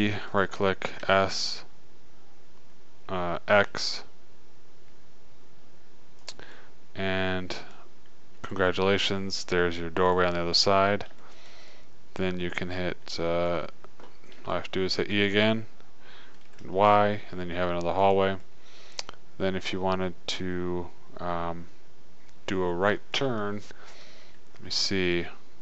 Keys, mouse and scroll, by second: 0.2 e, 1.3 s, 8.4 middle click, 10.9-14.1 middle drag, 14.9-16.7 middle drag, 15.5 e, 18.8-20.5 middle drag.